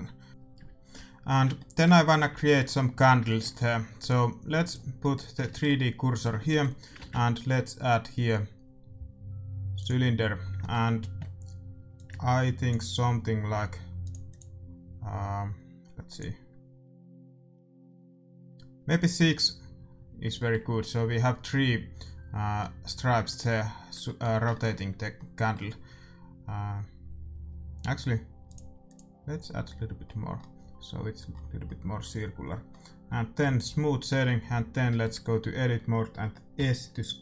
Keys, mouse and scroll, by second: 1.5-9.8 middle drag, 4.6-6.6 drag, 6.9 shift+a, 10.3 middle click, 11.9-13.6 drag, 14.0-17.9 drag, 19.3-22.6 middle drag, 22.8-27.5 middle drag, 28.5-33.3 drag, 30.0-34.0 middle drag, 33.5-34.8 drag, 34.0 Tab, 36.5 s.